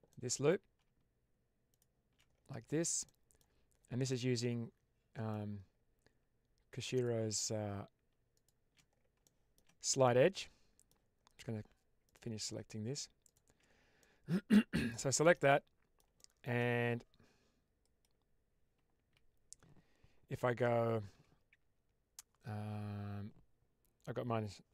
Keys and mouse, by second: 0.0 middle click, 1.6 alt+shift+click, 2.7 shift+middle click, 2.9 middle click, 4.0-5.2 middle drag, 9.2 shift+middle click, 9.9 middle click, 13.2 ctrl+shift+right click, 13.9 middle click, 15.1 shift+middle click, 15.4 middle click, 16.1 shift+middle click.